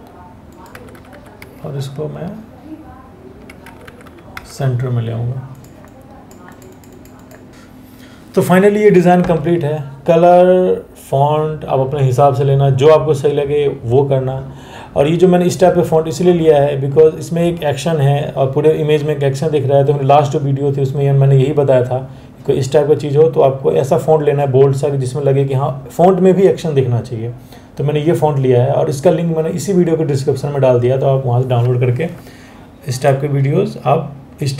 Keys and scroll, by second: 0.7 Up, 1.0-3.1 Right, 3.6 Up, 4.0 Down.